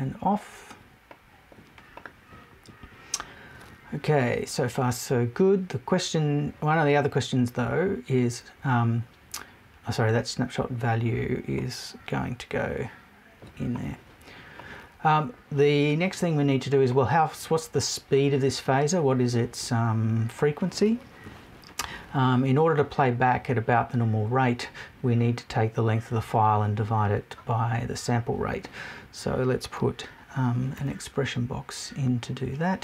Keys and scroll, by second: 21.2 Left.